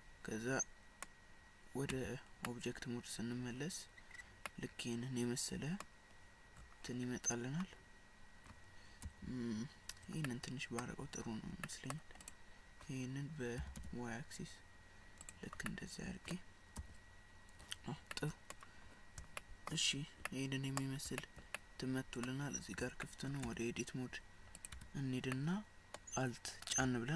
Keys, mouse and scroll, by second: 0.0 middle click, 1.9 Tab, 2.4 scroll up 1, 2.5 middle click, 4.1-4.5 scroll down 4, 4.5 middle click, 6.6-6.9 scroll up 5, 6.9-7.4 scroll down 3, 9.1 KP_1, 10.3 middle click, 11.7 middle click, 12.3 click, 13.6 g, 15.7 middle click, 16.8 KP_1, 18.2 middle click, 19.4 shift+middle click, 19.9 scroll up 1, 20.3 middle click, 21.2 shift+middle click, 21.6 middle click, 22.6-22.9 scroll up 3, 23.1 shift+middle click, 23.5 Tab, 24.6 click, 24.8 Tab, 25.4 middle click.